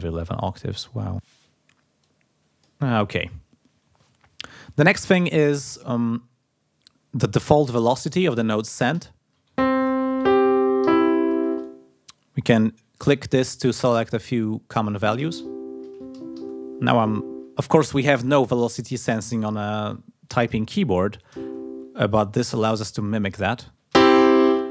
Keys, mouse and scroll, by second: 0.1 scroll up 1, 2.0-2.9 scroll up 1, 11.6-14.4 drag, 22.2-23.4 drag.